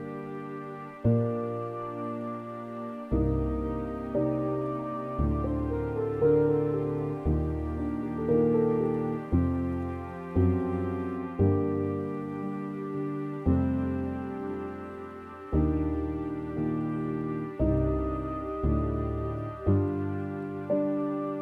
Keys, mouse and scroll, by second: 0.5 middle click, 1.0-1.5 scroll up 6, 1.5-6.9 middle drag, 6.9 click, 7.9 scroll down 2, 8.3-8.9 scroll up 6, 12.6 click, 15.1 click, 16.9-21.4 drag.